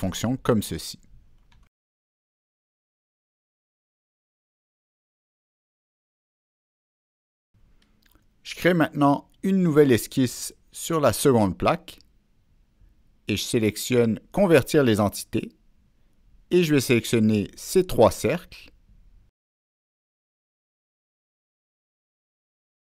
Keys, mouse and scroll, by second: 2.0-4.8 middle drag, 4.6-5.4 scroll up 2, 5.5-5.8 scroll down 1, 6.0-7.7 middle drag, 8.2 click, 8.3 middle click, 10.6 click, 11.7 click, 13.7 Escape, 15.7 click, 16.2 Escape, 19.6 click, 21.5 click.